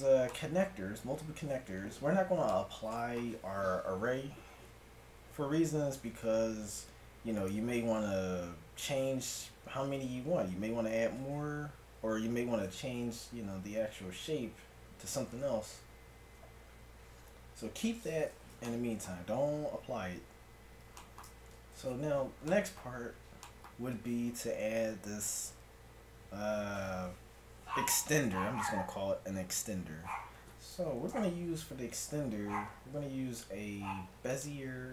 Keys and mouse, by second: 2.2-7.4 middle drag, 7.4-9.4 right drag, 9.4-10.9 middle drag, 13.8 Tab, 15.9 KP_1, 17.7 Tab, 20.5 middle click, 21.8 a, 31.1 shift+a.